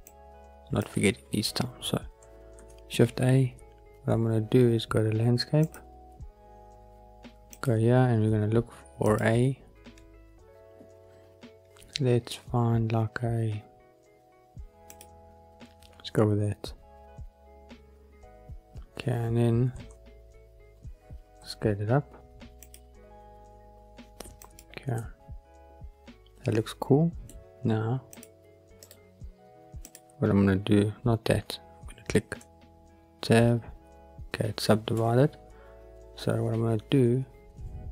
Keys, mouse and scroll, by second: 0.0 click, 7.5 click, 9.0-16.3 drag, 22.5 click, 24.3 click, 24.9-27.2 middle drag, 28.0 click, 28.7 right click, 32.3 Tab, 33.6 scroll up 2, 34.9 Tab.